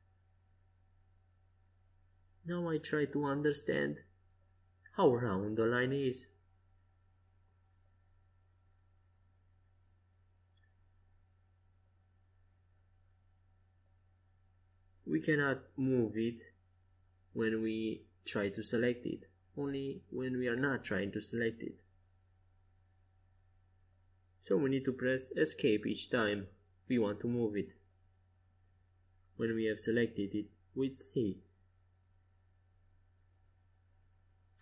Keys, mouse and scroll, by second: 4.0 c, 5.7-7.5 drag, 8.5 Escape, 8.9 a, 10.1 c, 17.6-19.2 drag, 19.1 a, 23.5 c, 26.9-29.9 drag, 30.6 a, 31.3 c, 33.4-34.6 drag.